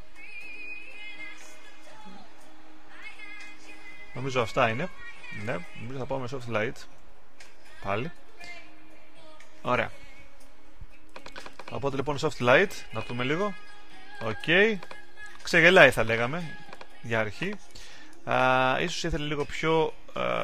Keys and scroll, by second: 0.0-8.2 typing.